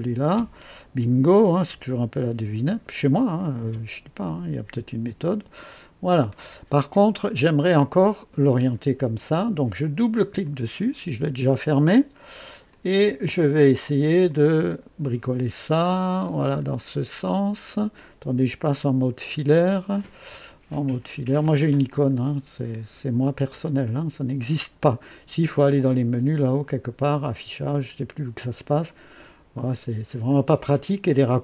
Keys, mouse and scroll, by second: 1.6 KP_9, 2.1 KP_0, 2.6 Return, 4.2 click, 4.8-6.5 drag, 7.1 click, 10.4 click, 12.6 click, 14.1 click, 14.6-17.5 scroll down 11, 17.5 scroll up 2, 19.5 &, 21.8 click, 24.6 scroll down 1.